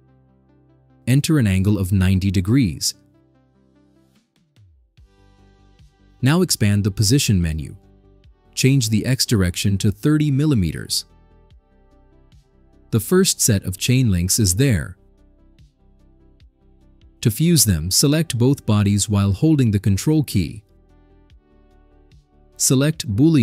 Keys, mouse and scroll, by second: 1.2 click, 2.4 9, 2.7 0, 6.6 click, 8.1 click, 10.3 3, 10.7 0, 12.2 click, 13.2 click, 14.0-15.1 right drag, 17.6 click, 19.0 click, 21.2 ctrl+click.